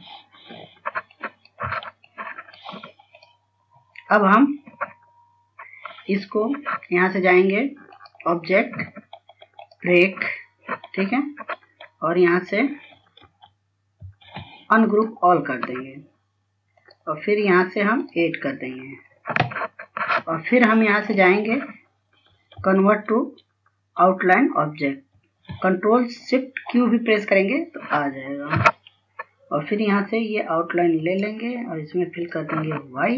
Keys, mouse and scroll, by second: 1.6 F2, 1.9 click, 2.5 F2, 2.9 click, 4.5-7.3 scroll down 1, 8.8 click, 14.2 ctrl+s, 14.9 ctrl+s, 15.9 click, 19.7-20.5 scroll up 1, 22.0 click, 23.6 ctrl+s, 26.2 s, 28.3 click, 29.3-29.7 scroll down 1, 32.1 right click.